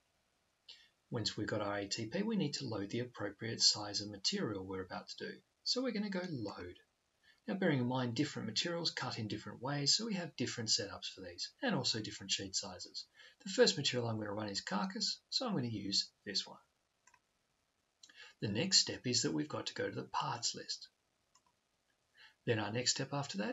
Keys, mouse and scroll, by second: 6.5 click, 14.4-16.1 drag, 16.5-18.3 drag, 21.1 click.